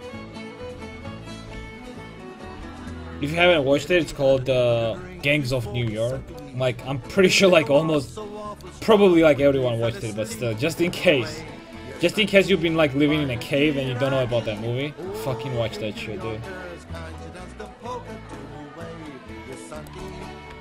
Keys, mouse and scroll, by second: 1.6 l, 2.6 h, 4.0 KP_5, 4.1 KP_1, 4.4 KP_5, 7.1-10.6 middle drag, 9.2 c, 10.7-12.4 right drag, 14.3 c, 20.0 x.